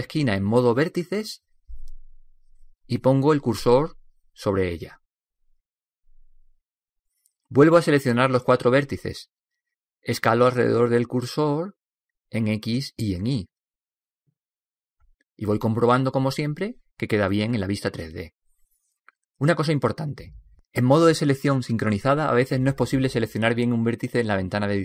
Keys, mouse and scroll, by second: 0.1 g, 3.0 right click, 4.3 shift+s, 9.7 b, 12.3 s, 15.9 s, 24.0-24.8 middle drag.